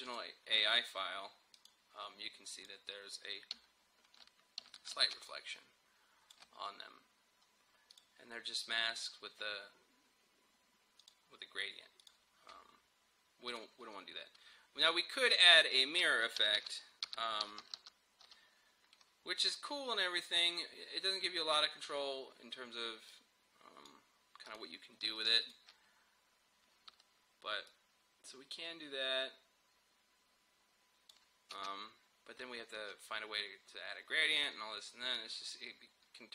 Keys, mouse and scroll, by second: 0.1 click, 3.7 alt+scroll up 1, 4.8 alt+scroll down 1, 5.1 space, 5.3 click, 5.7 space, 7.9 click, 11.1 click, 16.2-18.8 typing, 20.3-24.5 drag, 24.9-25.8 typing, 25.5-31.6 drag, 31.6 space.